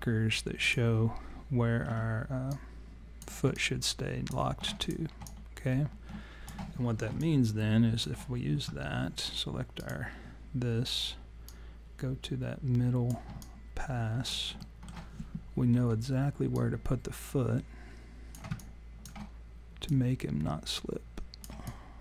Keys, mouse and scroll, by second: 0.6 click, 0.6 scroll up 1, 1.9 w, 2.5 click, 3.6 alt+click, 4.8 click, 5.3 alt+click, 6.8-7.4 scroll down 2, 7.2 alt+click, 9.8 click, 11.5 click, 13.4 alt+click, 13.6 alt+click, 14.6 alt+middle click, 16.5 click, 18.6 alt+click, 19.9 click, 21.7 alt+click.